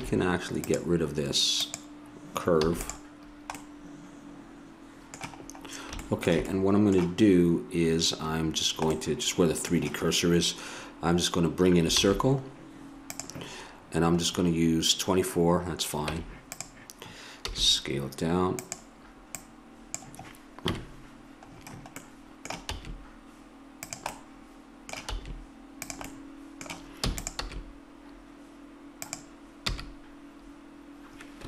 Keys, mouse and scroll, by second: 0.6-2.6 drag, 2.6 x, 8.4-11.4 middle drag, 12.0 shift+a, 16.0 Tab, 17.5 s, 19.5-20.6 drag, 20.7 KP_Decimal, 22.7 s, 25.1 s, 27.0 e, 27.3 s, 29.6 e.